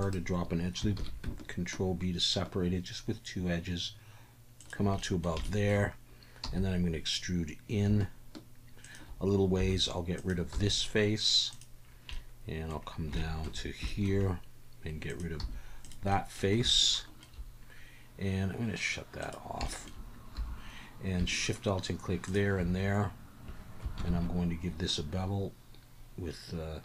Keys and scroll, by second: 1.0 ctrl+b, 6.4 e, 10.3 3, 10.5 x, 15.4 x, 20.4 2, 24.0 ctrl+b.